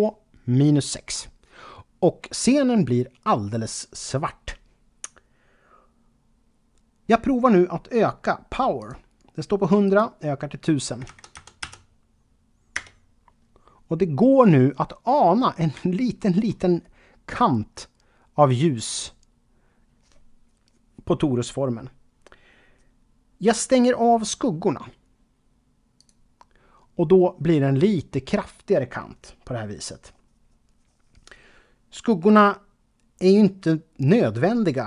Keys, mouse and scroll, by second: 8.8 click, 9.8 click, 11.0 KP_1, 11.3 KP_0, 12.7 Return, 15.0-15.9 scroll up 3, 16.2 shift+middle click, 16.7-18.8 scroll up 3, 25.9 click.